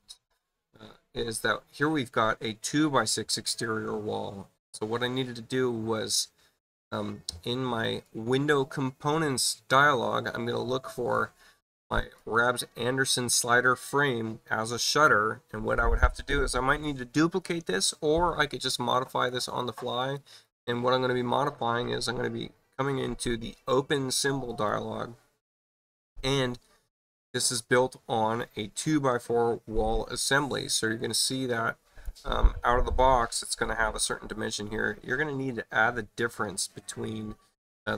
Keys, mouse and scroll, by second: 0.7 click, 8.0 click, 10.9 click, 12.1 click, 19.0 right click, 19.9 click, 20.4 right click, 24.4 click, 31.3 click.